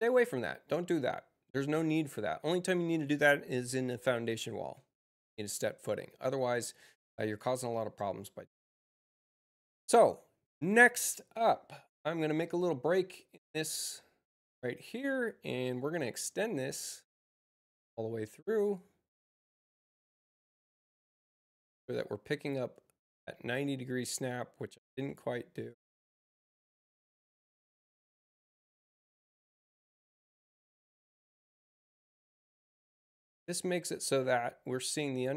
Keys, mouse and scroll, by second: 9.5 click, 13.6 click, 15.6-23.0 drag, 25.5 click, 28.5 click, 29.7 click.